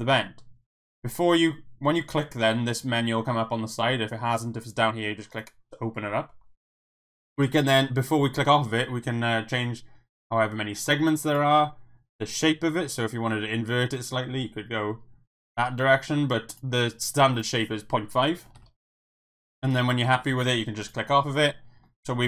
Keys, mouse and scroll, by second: 4.3 click, 5.3 click, 10.1-11.3 drag, 12.1-16.6 drag, 17.3-19.3 drag, 20.8 click, 21.2 middle click, 22.0 middle click.